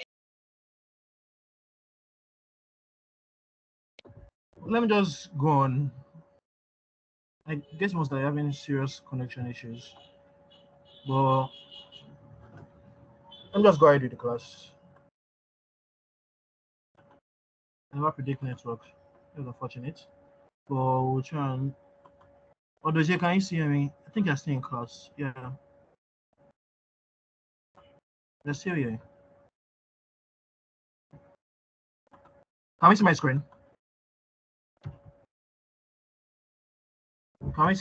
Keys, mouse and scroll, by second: 34.8 Tab.